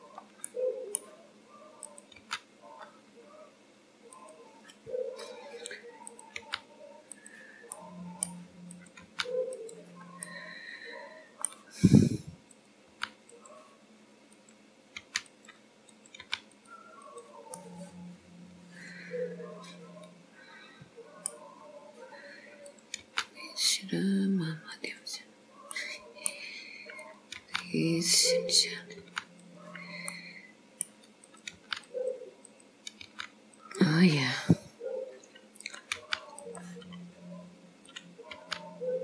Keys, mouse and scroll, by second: 0.6 middle click, 1.9 click, 2.3 g, 5.2-6.0 scroll up 1, 6.2 click, 6.4 g, 7.8 middle click, 8.7 click, 9.1 g, 10.3 middle click, 11.6 scroll down 1, 12.6 click, 12.9 g, 14.4 click, 15.1 g, 16.1 click, 16.3 g, 17.1 click, 17.7 middle click, 21.6-22.7 scroll up 2, 22.7 click, 23.1 g, 25.8 middle click, 27.1 click, 27.5 g, 28.7 click, 29.1 g, 30.2 middle click, 31.4 click, 31.6 g, 32.7 click, 33.0 g, 34.1 scroll down 1, 35.7 click, 36.1 g, 36.9-37.9 scroll down 3, 37.9 click, 38.4 g.